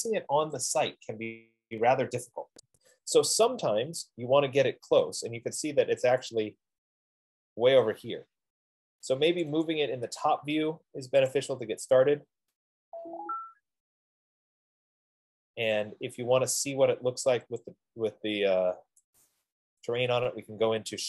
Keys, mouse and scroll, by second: 4.1-5.2 scroll, 6.5 right click, 6.9 scroll, 9.9 click, 10.3 click, 11.7 scroll, 11.8 click, 11.9 click, 12.5-15.1 scroll, 13.7 F15, 15.1 scroll down 9, 15.4-16.5 scroll, 18.1 click, 19.6 click.